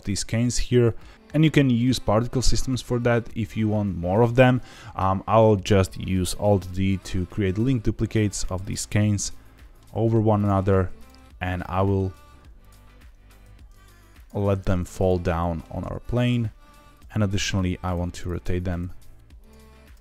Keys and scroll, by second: 7.0 alt+d, 9.9 alt+d, 10.5 alt+d, 12.0 alt+d, 13.4 alt+d, 14.4 alt+d, 15.7 alt+d, 17.1 r, 17.3 r, 18.5 r, 19.8 r.